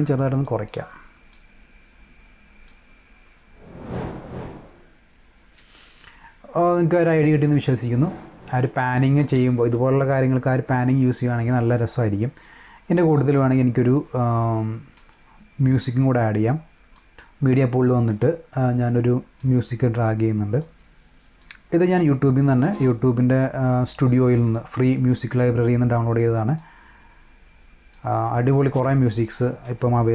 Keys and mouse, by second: 0.3 click, 2.6 click, 6.8 click, 7.4 space, 16.4 click, 19.3-20.5 drag, 21.3-22.8 drag, 23.9 click, 26.5-27.9 drag, 28.5 click, 29.6 =.